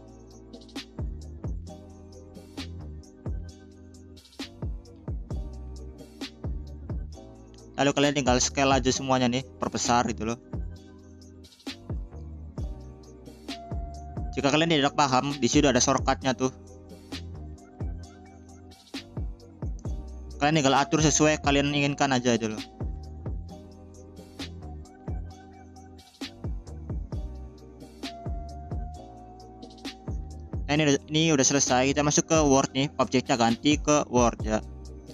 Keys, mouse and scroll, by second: 0.2 g, 5.6-6.8 drag, 7.0 a, 7.5-8.5 scroll down 3, 8.5-9.2 scroll down 2, 9.2 s, 14.2-15.9 shift+middle drag, 16.1-16.7 scroll up 5, 18.4 scroll up 1, 18.4 s, 21.1 click, 21.5-22.0 scroll up 3, 21.6 middle click, 22.3 s, 23.3 s, 24.4 scroll down 2, 24.8 click, 25.3 middle click, 25.8 click, 26.3 s, 27.7-28.8 middle drag, 32.8-33.5 drag.